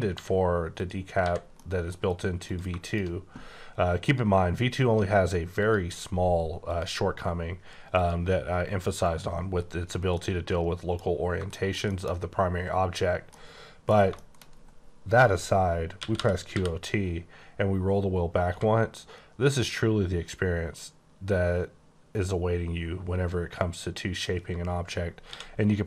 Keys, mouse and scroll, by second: 0.1 h, 0.7 click, 1.2 h, 1.5 middle click, 2.0 scroll down 1, 2.4 click, 2.8 click, 4.0 click, 5.6 click, 6.6 click, 7.9 click, 9.0 click, 10.3 middle click, 11.0 scroll up 3, 11.5 shift+middle click, 13.3 middle click, 13.9 scroll down 2, 14.1 shift+middle click, 16.0-16.5 typing, 17.4-18.4 scroll down 1, 18.4 x, 25.3 c.